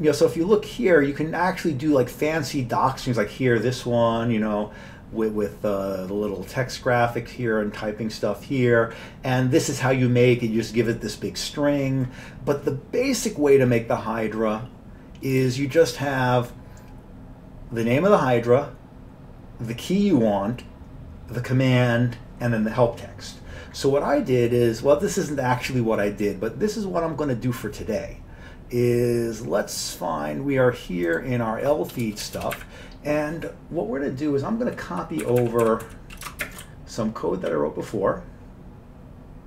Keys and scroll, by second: 32.0 Return, 32.3 Return, 32.4 Return, 32.5 Up, 35.2 Up, 35.4 Up, 35.7 Up, 35.9 Right, 36.5 ctrl+shift+space, 36.6 ctrl+n, 37.1 ctrl+n, 37.2-37.5 ctrl+n.